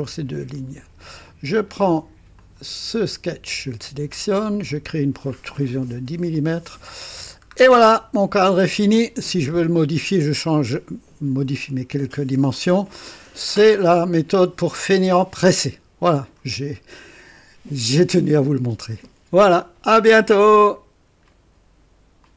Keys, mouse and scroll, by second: 0.2 click, 2.3 click, 4.5 click, 6.3 click, 7.3 scroll down 1, 7.8-9.4 drag, 12.5-14.7 drag, 15.0-16.5 drag, 21.2 right click, 22.2 click.